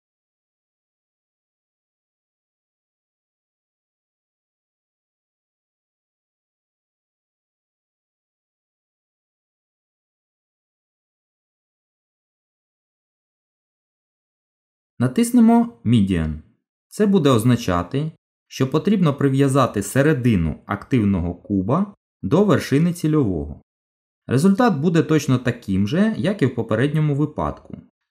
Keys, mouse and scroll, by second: 14.2 click, 25.7 g.